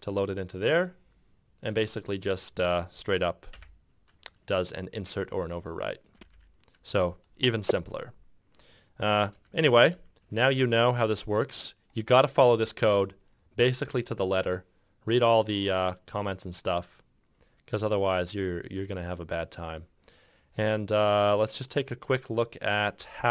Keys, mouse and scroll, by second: 3.7 ., 6.3 f, 6.5 f, 9.5 ctrl+F6.